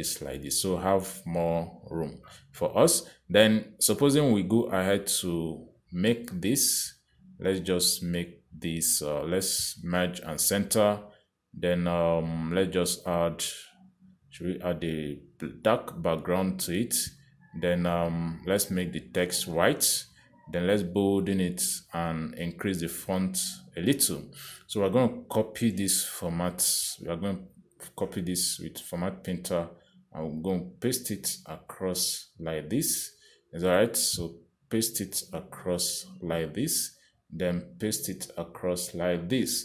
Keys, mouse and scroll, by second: 0.7 click, 1.2 click, 2.2 click, 2.6 click, 3.6 click, 4.9 click, 11.1 click, 14.3 click, 17.0 click, 19.3 click, 20.9 click, 22.3 click, 23.6 click, 26.9 click, 28.0 click, 32.0 click, 36.1 click, 39.0 click.